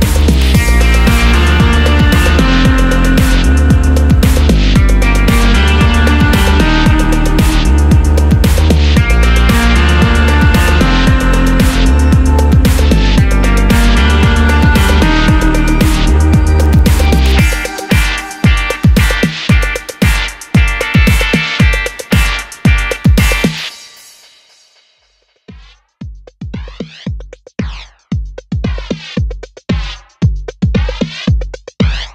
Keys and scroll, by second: 2.7-3.0 typing, 3.0 Return, 4.6 super+c, 4.7 super+v, 18.0 super+d, 20.5 super+d, 22.7 super+d.